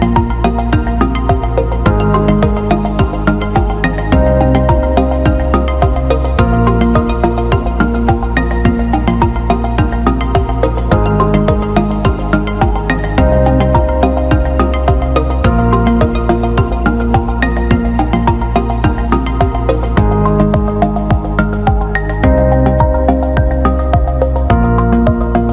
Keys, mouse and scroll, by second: 0.3-0.7 alt+shift+middle drag, 3.1 alt+shift+middle drag, 3.4-4.0 alt+middle drag, 4.3 alt+shift+middle drag, 4.7 alt+middle click, 7.3 Tab, 8.0 middle click, 8.8 click, 9.1 middle click, 10.0 shift+click, 10.9 alt+middle click, 12.0 alt+middle click, 12.9 shift+d, 14.8-16.8 drag, 17.3 alt+middle click, 18.5 click, 19.3 click, 20.5 shift+click, 21.9-22.9 right drag, 22.9 click, 23.7 alt+middle click, 25.2 click.